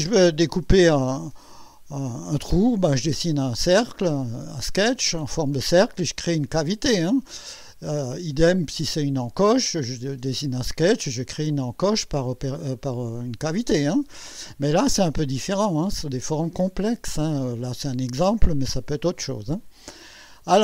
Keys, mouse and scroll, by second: 8.9 click, 14.7-16.2 drag, 16.8-17.6 drag, 18.9-20.6 drag.